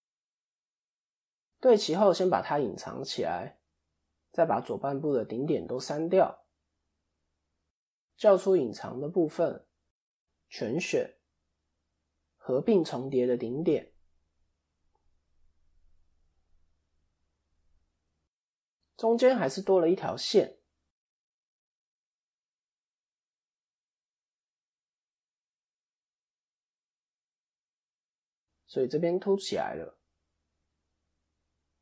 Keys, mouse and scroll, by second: 0.3 scroll down 12, 0.4 shift+middle click, 0.8-1.7 scroll up 2, 2.7-3.4 scroll up 2, 2.7 h, 3.8 click, 5.5 x, 8.9 alt+h, 9.5 shift+middle click, 10.6 a, 11.9 alt+m, 13.7 middle click, 15.1-15.9 scroll up 3, 15.5 shift+middle click, 16.1-16.5 scroll up 2, 16.3 middle click, 20.0 shift+middle click, 20.2-21.0 shift+scroll up 2, 21.0 click, 21.0-22.9 scroll up 2, 22.9 click, 25.6 click, 25.6-26.7 scroll down 5, 26.7 click, 26.7-27.2 scroll down 3, 27.2 scroll up 2, 27.5 middle click, 30.1 click, 30.9 middle click, 30.9-31.8 scroll up 1.